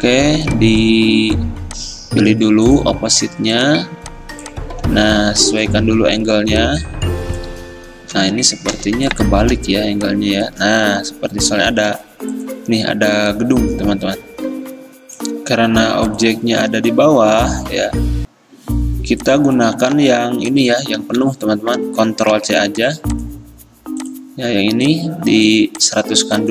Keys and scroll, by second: 8.9 o, 12.0 v, 20.1 ctrl+z, 21.2 ctrl+z, 22.4 ctrl+c.